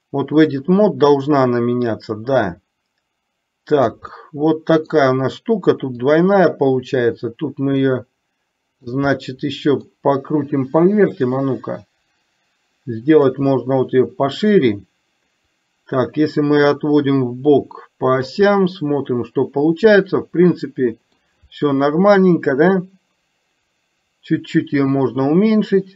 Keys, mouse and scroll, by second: 0.4-4.0 drag, 4.2 middle click, 6.2-8.9 drag, 9.2 middle click, 11.4-13.4 drag, 13.5 middle click, 15.5-18.4 drag, 18.7-21.3 middle drag, 22.9-25.9 drag.